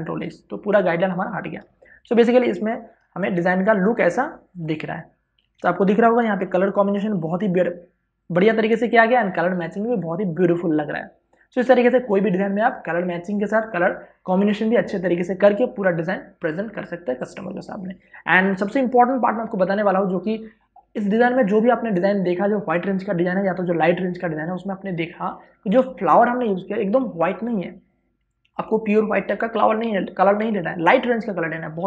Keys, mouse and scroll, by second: 0.1 ctrl+h, 0.5 ctrl+click, 0.6 ctrl+h, 1.1 ctrl+click, 1.2 ctrl+h, 2.8 click, 3.0 space, 4.8 ctrl+alt+shift+click.